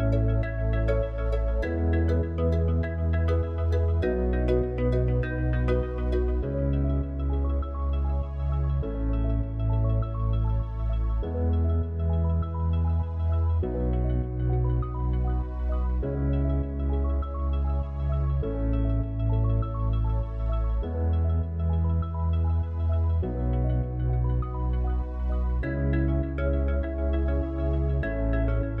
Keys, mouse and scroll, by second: 1.2 ctrl+a, 5.1 click, 17.3 click, 19.8 click, 25.3-28.8 drag.